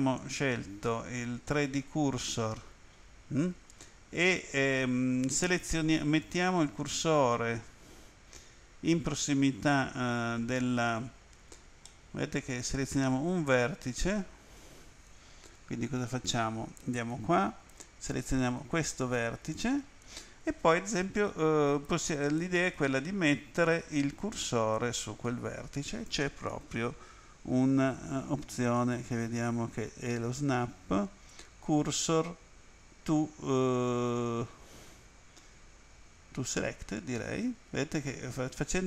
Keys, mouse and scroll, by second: 0.2 click, 1.5 click, 11.9 middle click, 13.1 right click, 16.9 click, 18.6 right click, 28.8 click, 37.0 click.